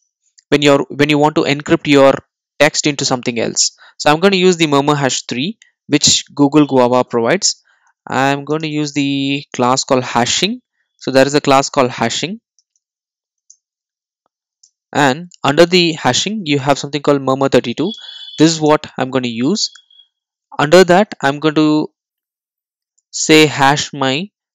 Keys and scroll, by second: 13.5 Return.